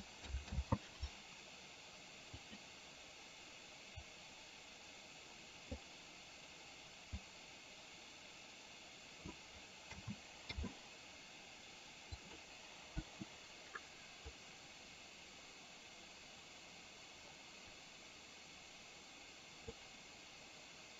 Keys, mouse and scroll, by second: 0.6 ctrl+z, 2.4 click, 4.2-5.9 drag, 7.2-9.4 drag, 10.0 a, 10.6 i, 12.2 click, 13.1 Delete, 14.5-19.9 drag.